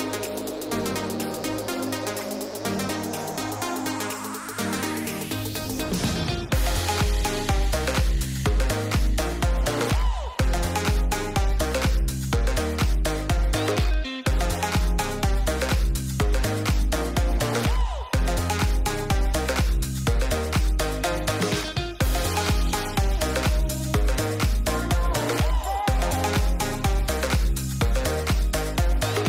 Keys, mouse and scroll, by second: 6.6 click, 9.7 click, 12.5 click, 16.7 click, 20.2 click, 22.7 ctrl+s, 26.6-26.9 shift+middle drag.